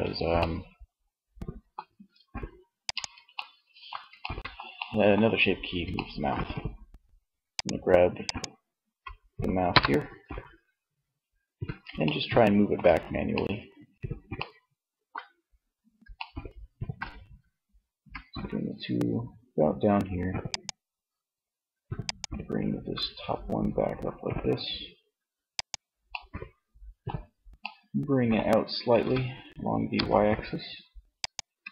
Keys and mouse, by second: 0.8 ctrl+Tab, 8.7 KP_1, 17.3 g, 20.0-22.1 drag, 22.1 g, 25.0 click, 25.5-26.8 middle drag, 28.1 g, 30.4-31.6 drag, 30.5 Tab.